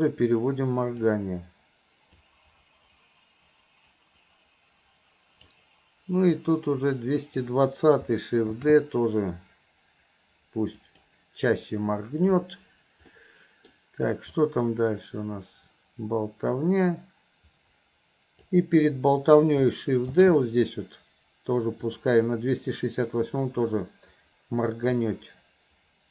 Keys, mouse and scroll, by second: 2.3-5.6 drag, 6.5 click, 13.3 middle click, 14.5-18.6 drag, 25.0-26.1 drag.